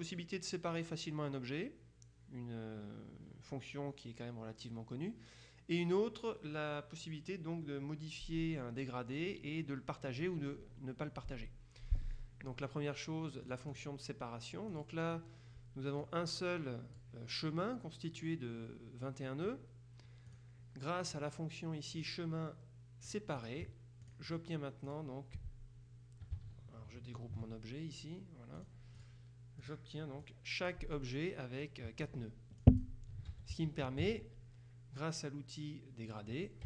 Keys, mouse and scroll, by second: 13.6 click, 14.8 click, 16.1 click, 20.4 click, 22.0 click, 23.2-24.0 drag, 24.1-24.9 drag, 25.0 click, 28.7-29.6 drag, 29.7 click, 31.7-32.6 drag, 32.7 click, 33.4 ctrl+z, 36.2 click.